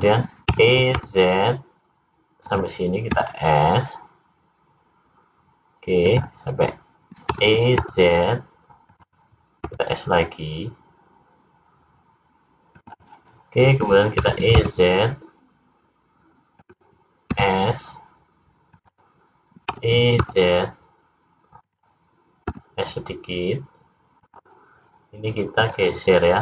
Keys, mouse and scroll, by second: 0.5 e, 3.1 s, 7.3 e, 9.6 s, 14.2 e, 17.2 s, 19.7 e, 22.4 s, 25.5 click.